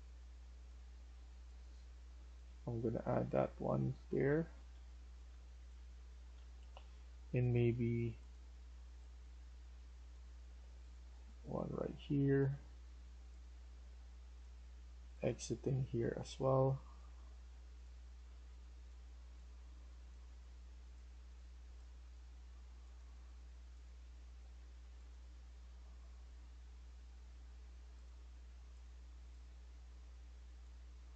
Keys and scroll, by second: 1.3-2.9 typing, 3.8 Escape, 4.3-7.1 typing.